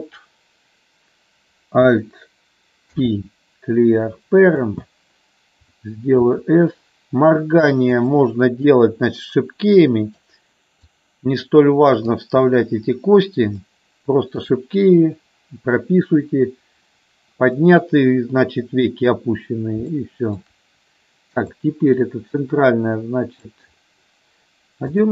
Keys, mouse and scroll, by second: 2.9 alt+p, 6.3 s, 7.9 click, 8.6-10.1 drag, 10.9-12.1 drag, 13.6 shift+middle click, 19.9 shift+middle click, 21.5-23.5 drag.